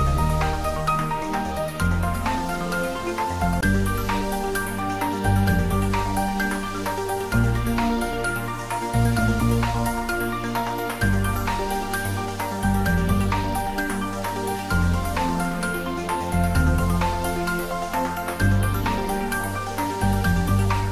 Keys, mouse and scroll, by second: 0.6 click, 2.9 shift+click, 4.9-5.7 scroll up 1, 7.2 `, 7.8 3, 9.6-10.1 scroll up 1, 11.0 click, 13.3 shift+click, 15.3 ctrl+z, 15.9 shift+click, 18.7 shift+click, 20.0 ctrl+z.